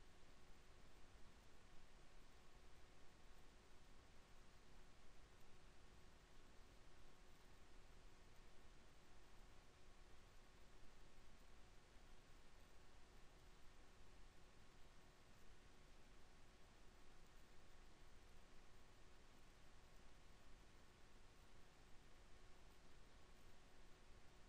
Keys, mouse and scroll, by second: 1.8 ctrl+r, 4.7 ctrl+r, 9.3 ctrl+r, 15.7 ctrl+r, 17.4 ctrl+r, 20.1 ctrl+r.